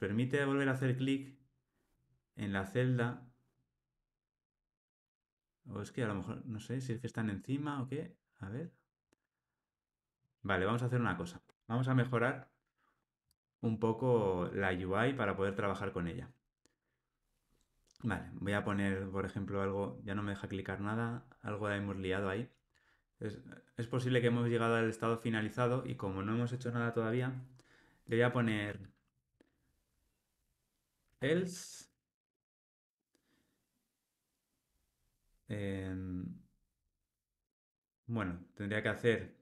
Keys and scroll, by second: 37.4 super+z.